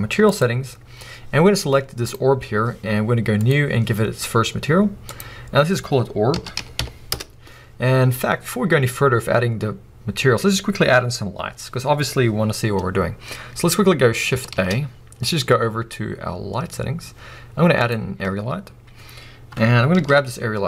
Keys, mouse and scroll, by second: 3.4-8.8 drag, 7.2 Return, 11.3 click, 12.7 scroll down 2, 12.8 click, 13.1 scroll up 1, 14.5 shift+a, 15.1-17.9 drag.